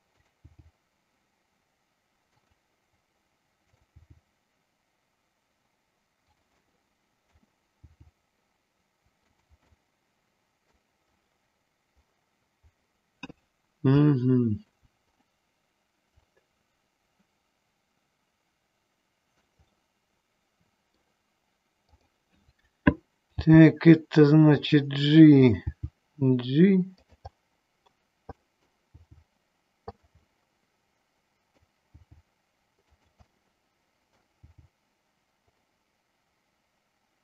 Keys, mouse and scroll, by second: 0.3 click, 2.5 click, 3.8 click, 6.4 click, 6.4 g, 6.8 middle click, 9.4 click, 9.9 middle click, 14.3 shift+middle click, 16.3-16.6 scroll up 1, 16.6-19.5 middle drag, 19.9-21.0 middle drag, 22.0 click, 23.5 g, 24.8 click, 27.1 click, 27.1 g, 27.4 middle click, 28.5 middle click, 28.9 g, 30.4-31.8 middle drag, 32.0 g, 33.0 click, 33.5 middle click.